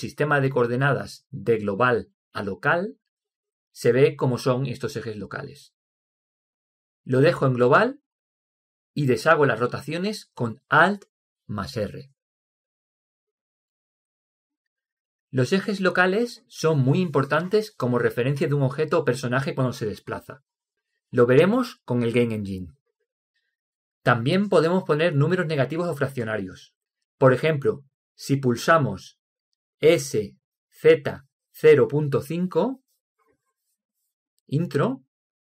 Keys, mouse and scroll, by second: 8.0-9.8 drag, 12.2 alt+r, 18.9-20.9 middle drag, 23.7-25.7 middle drag, 30.2 s.